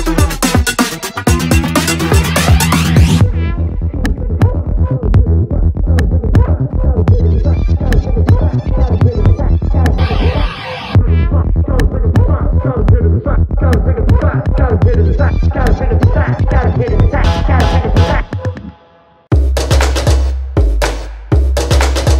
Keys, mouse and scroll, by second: 3.0 click, 5.7 space, 6.2 click, 9.1 space.